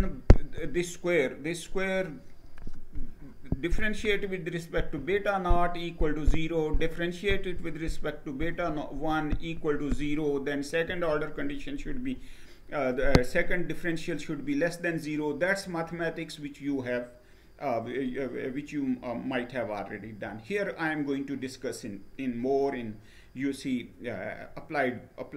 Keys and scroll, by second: 19.7 Down.